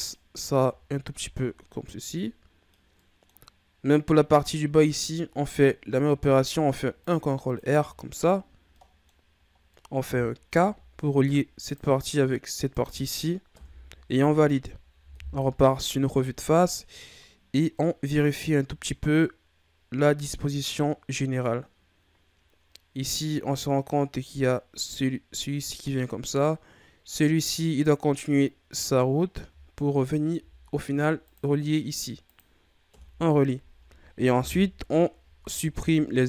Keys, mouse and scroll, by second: 0.2-1.2 scroll down 7, 1.2-1.9 scroll up 4, 1.9 scroll down 3, 2.2-5.9 middle drag, 6.0 ctrl+r, 7.9-8.7 scroll up 2, 8.7 middle click, 9.2-9.7 scroll up 2, 9.7 middle click, 10.6 k, 14.2-15.1 scroll down 2, 15.1 KP_1, 16.2-17.5 scroll up 3, 17.5 scroll down 2, 17.7-20.8 middle drag, 30.3 k, 34.3 KP_1, 35.4 ctrl+Tab.